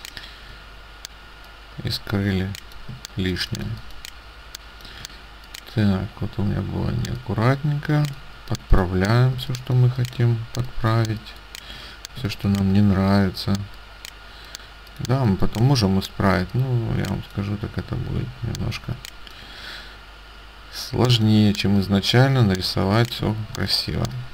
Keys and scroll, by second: 2.9 space, 9.4 space, 12.3 space, 15.2 space, 23.3 space.